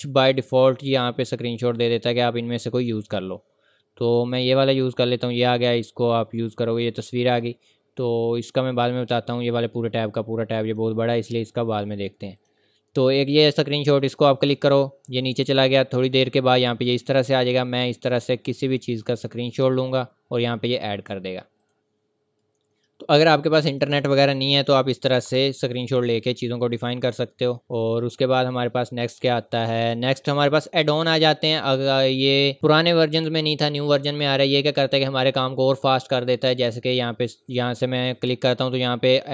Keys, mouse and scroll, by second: 4.3 click, 6.7-8.0 scroll up 1, 9.1 click, 18.2 click, 25.3 Return, 26.4 click, 27.6 Delete, 28.0 click, 37.2 click.